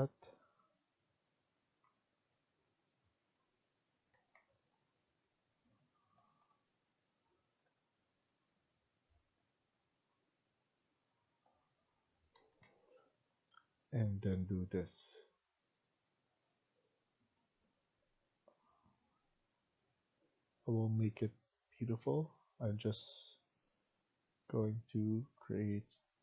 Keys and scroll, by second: 4.0 Escape, 4.2 Escape, 6.0 Left, 6.3 Left, 7.6 Right, 11.2 Right, 12.2 Escape, 12.6 Escape, 21.9 Escape.